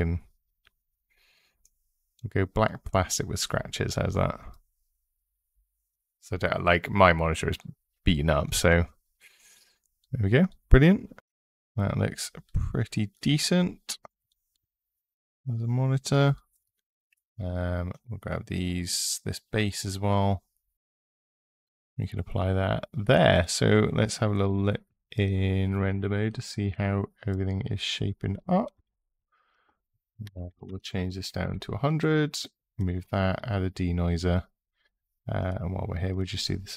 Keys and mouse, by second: 2.4 click, 12.2 click, 17.7 click, 20.6 click, 24.2-25.1 drag, 26.5-27.2 drag, 28.5-31.2 drag, 30.4 KP_0, 32.6 click, 35.2 click, 36.1-36.7 drag.